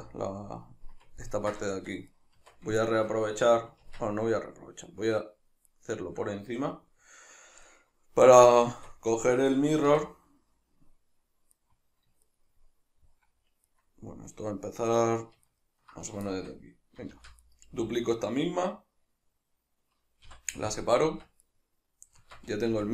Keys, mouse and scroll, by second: 2.2 right click, 2.4 Tab, 2.8-5.7 shift+middle drag, 3.8 Tab, 5.7 right click, 8.7 Tab, 9.9 1, 11.5 right click, 12.2 shift+right click, 13.7 right click, 15.5 ctrl+right click, 16.3-17.6 shift+middle drag, 17.2 shift+d, 17.6 right click, 20.3 p, 21.4 right click, 22.2 Tab.